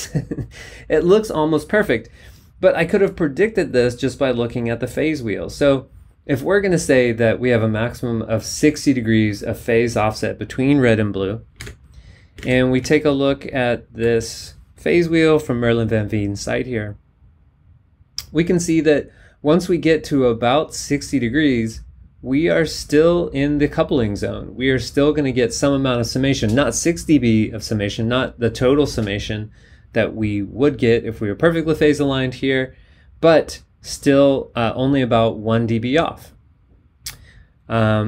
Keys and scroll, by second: 11.7 super+Tab.